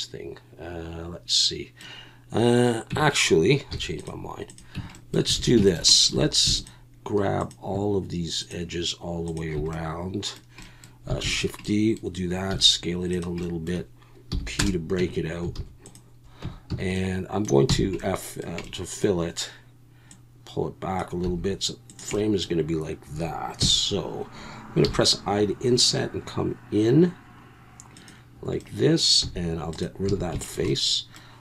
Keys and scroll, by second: 2.9 Tab, 3.7 x, 4.8 Tab, 5.4 alt+a, 6.1 2, 11.2 shift+d, 12.5 s, 14.3 p, 15.0 Tab, 15.6 alt+a, 16.4 Tab, 16.7 a, 17.7 f, 21.2 s, 23.6 KP_1, 24.8 i, 29.2 x, 30.1 a.